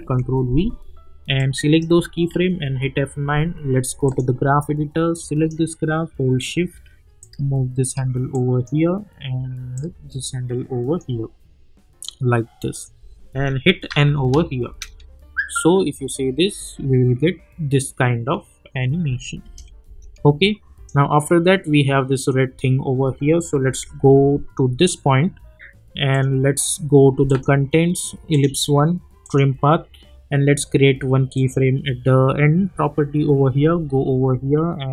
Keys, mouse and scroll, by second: 0.0 ctrl+v, 1.3 click, 2.6 F9, 4.0-12.7 drag, 13.9 n, 14.6 space, 19.0 space, 20.4-21.0 drag, 23.6 k, 26.1 click, 33.6 k.